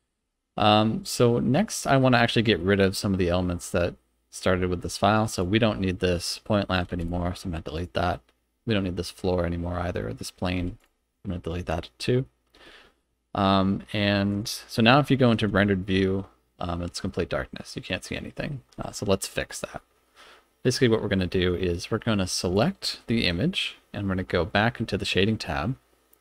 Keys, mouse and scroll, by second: 0.6 middle drag, 1.0 scroll down 2, 1.5 middle click, 2.0 scroll down 1, 2.6-3.6 middle drag, 5.4 click, 6.9 x, 7.7 click, 10.6 x, 11.3 middle click, 14.3 click, 15.5 z, 17.1-18.1 middle drag, 18.4 z, 22.5 click, 23.2-23.5 middle drag.